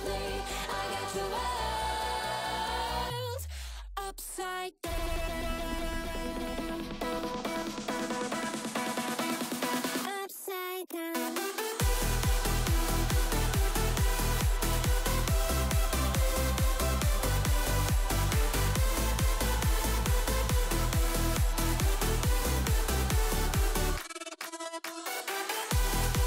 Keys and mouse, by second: 1.2 middle click, 2.2 ctrl+r, 8.5 Tab, 8.5 x, 8.5 z, 9.8-11.3 drag, 12.4 click, 12.7 click, 14.5 ctrl+3, 15.0-15.4 drag, 15.6 middle click, 16.7 click, 17.7 click, 17.9 Tab, 18.4 Tab, 18.5 middle click, 18.8 shift+middle click, 19.5 ctrl+r, 20.6 ctrl+b, 23.3 3, 24.4 middle click, 25.4 middle click, 25.5 click.